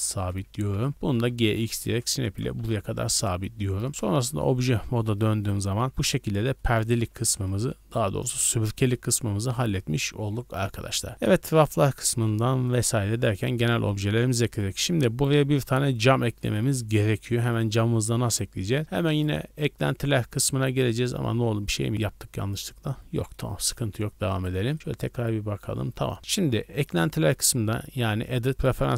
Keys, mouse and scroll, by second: 0.0 shift+middle click, 0.4-1.4 typing, 2.2 ctrl+click, 2.5 z, 3.1 Tab, 3.9 KP_0, 4.3 Tab, 4.6 a, 4.7 scroll up 1, 5.3-5.7 scroll up 3, 5.4 shift+middle drag, 5.9 right click, 6.2 scroll down 2, 6.6-7.1 shift+middle drag, 7.2 shift+middle click, 8.4-9.1 shift+middle drag, 9.1 scroll up 1, 11.1 click, 11.7-12.5 scroll down 4, 12.5 shift+middle drag, 12.8 scroll up 2, 13.2-13.9 shift+middle drag, 13.9-14.2 scroll up 1, 14.4 shift+middle click, 15.3 scroll down 2, 15.6-16.0 middle drag, 16.1 scroll down 2, 16.4-16.8 shift+middle drag, 16.8 scroll up 3, 17.3 middle drag, 17.5 scroll up 1, 18.3 right click, 19.1 drag, 20.4-20.8 scroll down 2, 20.8-21.2 scroll up 1, 21.6 ctrl+z, 22.0-23.3 middle drag, 23.5 scroll down 1, 24.3 right click, 24.7 right click, 24.7 z, 25.6 z, 26.2 a, 26.8-28.9 drag.